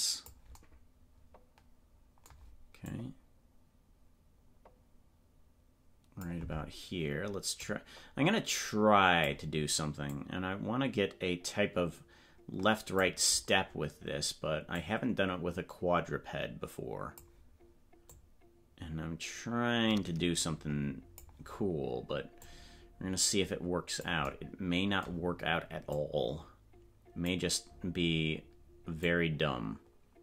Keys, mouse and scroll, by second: 2.9-6.4 drag, 7.6-9.3 drag, 10.2-17.2 drag, 18.2-21.3 drag, 22.4-24.1 drag, 25.9-27.3 drag, 29.0-30.2 drag.